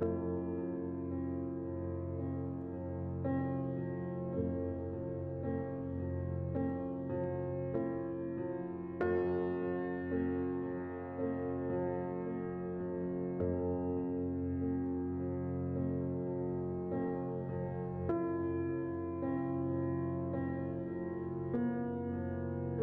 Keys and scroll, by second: 0.0 typing, 0.3 Return, 10.3 typing, 10.5 Return, 13.4 typing, 15.2 s, 17.1-19.1 typing, 18.0 Tab, 22.1 z, 22.1 a.